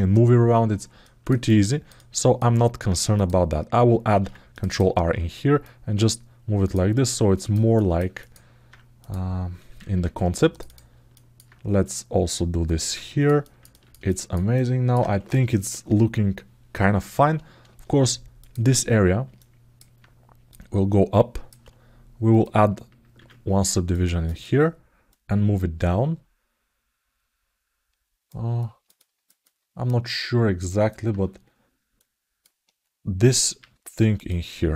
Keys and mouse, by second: 0.8 ctrl+alt+middle click, 1.2 alt+middle click, 1.8 alt+middle click, 2.9 click, 5.4-6.5 drag, 6.8 alt+middle click, 7.5 alt+shift+middle click, 7.9 alt+middle click, 8.7 click, 10.9 alt+middle click, 12.0 click, 13.2 ctrl+alt+middle click, 13.8 alt+shift+middle click, 14.3 alt+middle click, 18.1 click, 19.1 alt+middle click, 20.3 click, 22.1 click, 22.9 ctrl+r, 24.9-28.0 drag, 28.4 ctrl+alt+middle click, 29.2-30.7 alt+middle drag, 31.7 alt+middle click, 33.3 alt+q, 34.0 click.